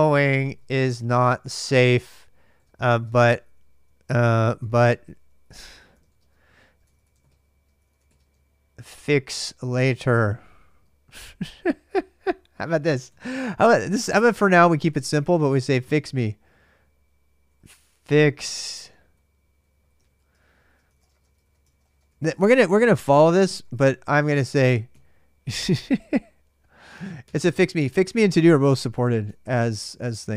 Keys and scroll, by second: 0.0-27.0 typing, 11.4 ctrl+[, 21.5 ctrl+[, 28.2-30.3 typing.